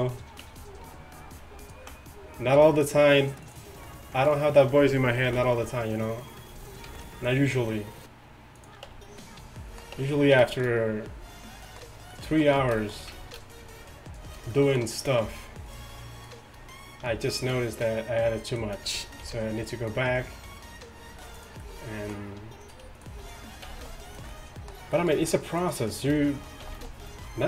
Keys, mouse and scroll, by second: 0.5 Tab, 2.6 r, 5.3 ctrl+b, 6.9 ctrl+r, 8.9 Tab, 10.0 Tab, 19.3 g, 23.7 click, 23.7 g, 25.6-26.7 drag, 26.7 g.